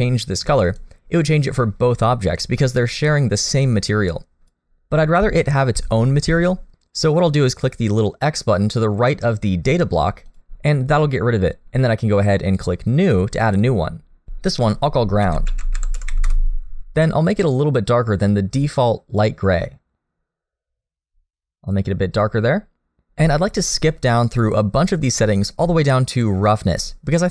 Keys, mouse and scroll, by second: 10.3 click, 13.0 click, 14.2 click, 18.2 click, 25.8-27.3 scroll down 1.